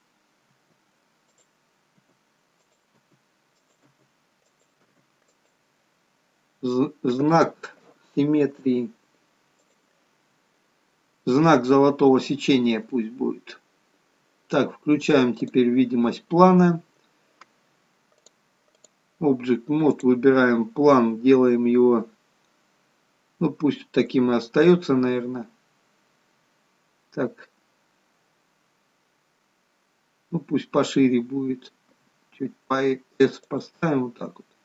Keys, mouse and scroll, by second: 0.5 e, 2.0 e, 3.0 e, 3.9 e, 4.9 e, 12.7-13.6 scroll up 4, 13.6-14.0 scroll up 6, 14.0-15.5 scroll down 1, 15.5 click, 15.5-16.7 scroll down 3, 18.2 click, 19.9 click, 24.6-27.6 scroll down 2, 31.9 s, 34.1-34.6 scroll down 1.